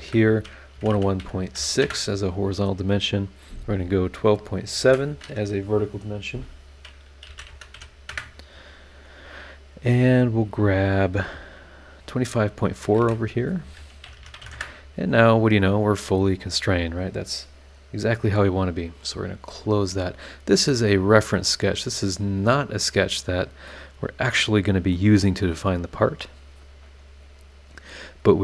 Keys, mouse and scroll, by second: 0.0-1.5 typing, 1.8 KP_Enter, 4.4 click, 4.8 shift+v, 7.2 KP_1, 7.3 KP_2, 7.5 KP_Decimal, 7.7 KP_7, 8.1 KP_Enter, 13.0 shift+v, 13.3 shift+click, 14.0 KP_2, 14.2 KP_5, 14.3 KP_Decimal, 14.4 KP_4, 14.5 KP_Enter, 19.6 click, 20.2 scroll up 2, 21.3-22.3 middle drag, 21.4 click, 21.4 right click, 22.3 scroll down 2, 22.8-23.2 scroll up 2, 23.7-25.1 middle drag, 23.8-25.1 right drag, 26.6 scroll down 2, 27.2 scroll up 2.